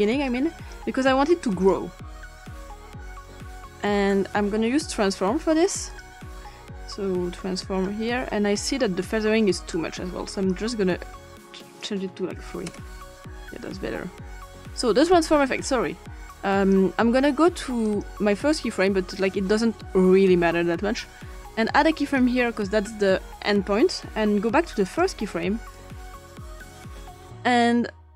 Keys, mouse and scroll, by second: 0.3 click, 1.5 click, 5.9 click, 6.9-7.9 drag, 9.7-10.5 drag, 11.5-12.9 drag, 12.4 3, 12.7 Return, 16.3-16.7 drag, 17.8 click, 22.0 click, 24.8 click, 25.7-26.7 drag.